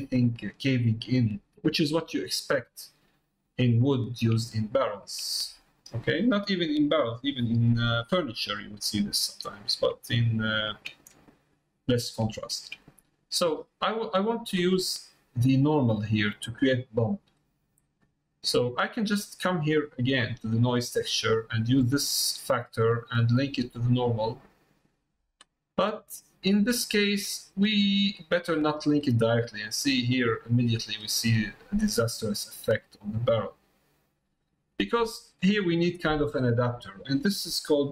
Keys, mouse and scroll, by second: 1.5 middle click, 2.0-3.1 middle drag, 3.5 middle click, 4.6 shift+middle click, 8.2 middle click, 9.6 middle click, 10.5 shift+middle click, 11.3 middle click, 12.4 shift+middle click, 12.9 middle click, 14.0 middle click, 17.5 middle click, 18.4 middle click, 20.2 click, 22.1-24.0 drag, 29.1-30.1 middle drag, 30.3 shift+middle click, 30.9 middle click, 32.4-33.5 middle drag, 34.0 middle click, 35.3 middle click, 36.6 middle click.